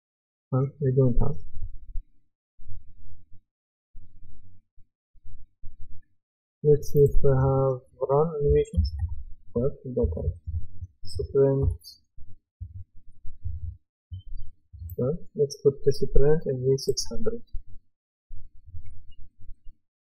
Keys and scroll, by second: 8.2-9.5 typing, 11.2-11.6 typing.